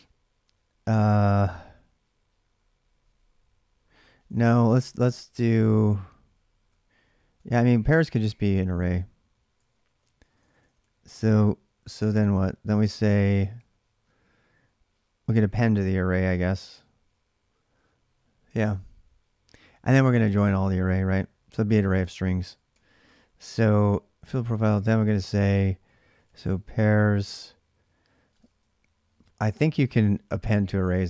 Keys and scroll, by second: 4.1 ctrl+[, 4.2-11.1 typing, 9.4 ctrl+[, 12.5 j, 13.3 k, 22.5-24.3 typing, 25.7-27.0 typing, 28.1-28.4 typing, 30.3 typing.